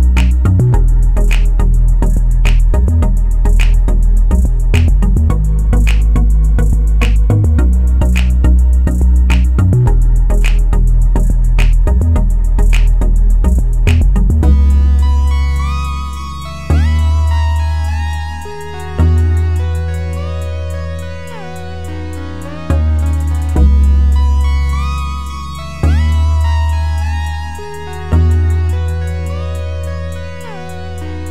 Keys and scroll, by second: 2.0-3.0 typing, 28.1 ctrl+z, 31.0 ctrl+z.